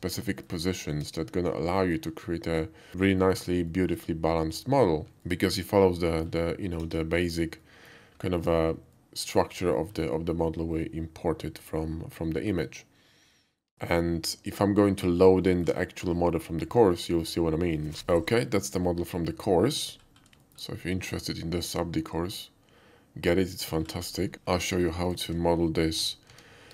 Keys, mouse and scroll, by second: 0.2 alt+middle drag, 1.1 KP_5, 1.5-2.9 middle drag, 3.7 shift+middle click, 5.1 KP_5, 5.3-6.3 middle drag, 7.6 middle click, 8.3 shift+middle click, 9.0-9.3 shift+middle drag, 9.7 shift+middle drag, 13.8-15.1 middle drag, 15.5 shift+middle click, 15.8 shift+middle click, 19.3-19.8 middle drag, 20.5 shift+middle click, 20.6-21.6 shift+middle drag, 25.0 click.